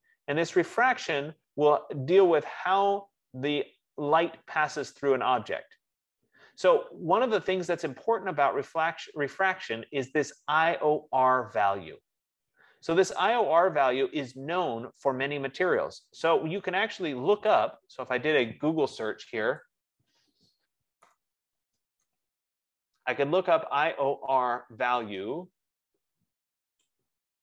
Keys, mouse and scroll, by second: 1.5 middle click, 4.4-6.7 middle drag, 18.2 click, 19.9 click, 20.9-26.0 typing, 24.8 click, 26.9 Return.